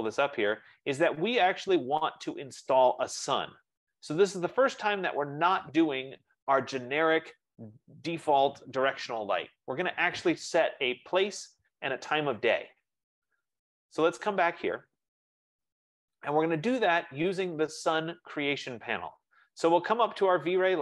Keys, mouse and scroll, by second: 5.0-10.1 drag, 14.0-18.9 drag.